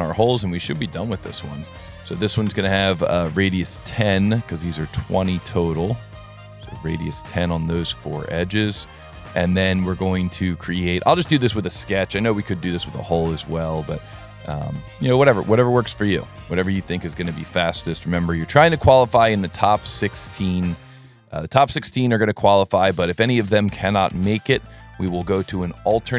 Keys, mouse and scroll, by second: 0.0 click, 1.2 Tab, 1.4 Tab, 1.9 Tab, 4.0 click, 5.2 click, 6.3 click, 7.3 click, 8.4 click, 9.2 click, 9.6 s, 10.9 s, 11.8 click, 12.8 s, 13.8 click, 15.9 click, 16.4 click, 19.9 click, 20.7 click, 22.5 scroll down 2, 22.9 middle click, 23.5 s, 24.4 click.